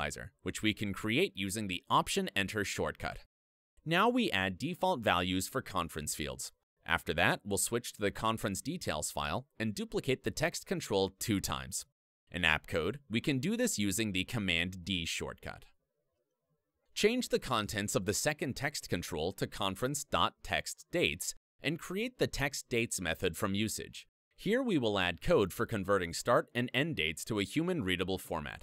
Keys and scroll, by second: 3.9 super+v, 9.2 super+e, 12.1 super+d, 18.1 alt+Up, 22.6 alt+Return, 26.9 super+v.